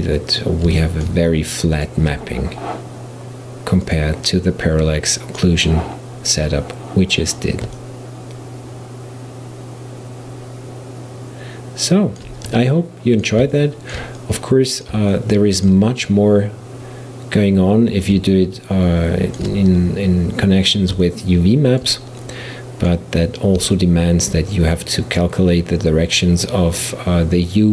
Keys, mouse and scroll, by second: 0.8-3.9 shift+middle drag, 3.9 click, 7.8-10.8 middle drag, 12.7-27.7 middle drag.